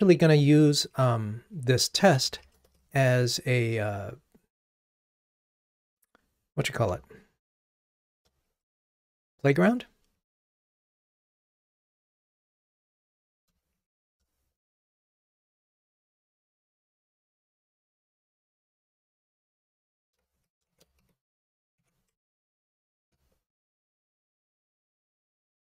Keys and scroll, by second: 11.2 super+z, 21.9 Delete.